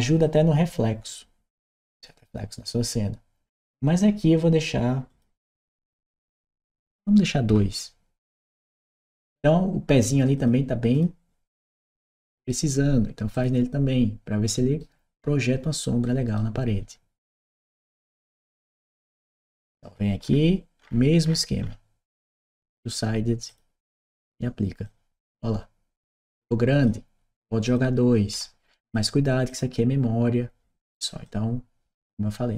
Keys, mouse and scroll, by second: 4.9 click, 8.0 click, 8.5 click, 10.1 click, 10.7 click, 11.5 right click, 13.1 click, 14.3 right click, 15.8 right click, 17.9 click, 18.0 click, 22.3 click, 23.3 click, 24.6-26.7 drag, 27.4 click, 28.7 click, 29.3 click, 31.0-32.5 drag.